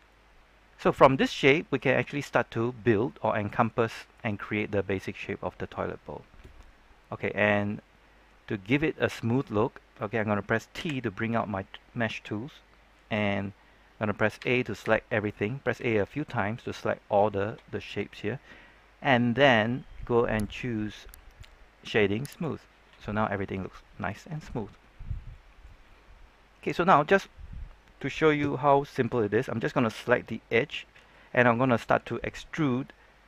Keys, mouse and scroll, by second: 0.0-7.6 middle drag, 7.6 scroll up 1, 8.6-10.7 middle drag, 10.7 t, 14.3-15.9 typing, 18.5-19.7 scroll up 2, 20.3-22.0 drag, 22.9-26.8 middle drag, 26.8-28.0 scroll down 1, 28.0-29.1 middle drag.